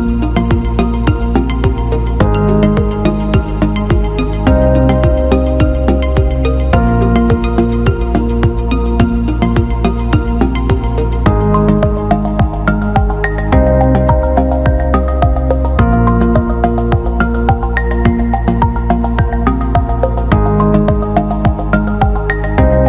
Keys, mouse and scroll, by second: 2.9-3.7 drag, 6.0 click, 6.7 click, 11.6 click, 13.4 click, 14.5 l, 16.4 click, 17.4 alt+middle click, 21.1 click, 22.5 click.